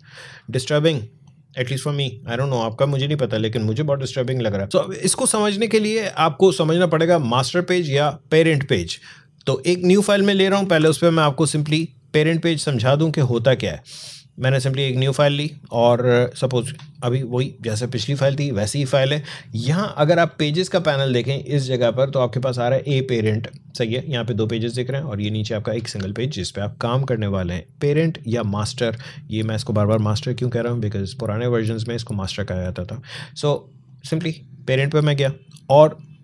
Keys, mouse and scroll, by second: 3.8 click, 4.0 shift+click, 10.6 ctrl+n, 14.5 click, 20.0 click, 34.8 click.